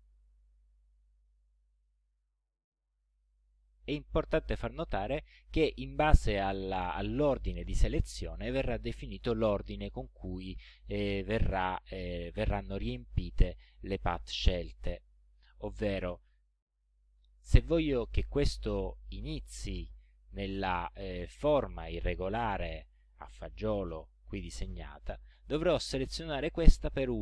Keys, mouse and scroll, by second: 15.1 click, 16.1 click.